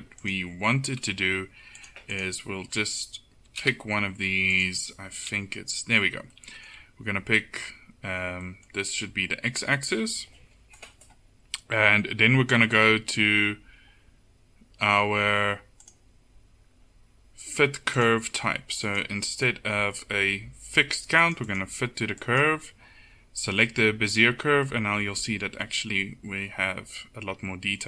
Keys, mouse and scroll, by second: 1.9-6.4 right drag, 6.4 middle click, 9.1 KP_7, 25.1 middle click.